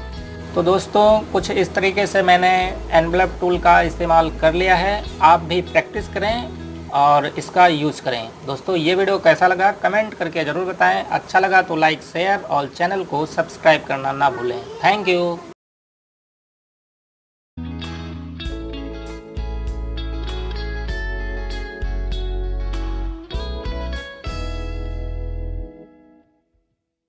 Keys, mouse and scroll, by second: 0.3-1.6 scroll down 1, 2.8-3.9 scroll up 1.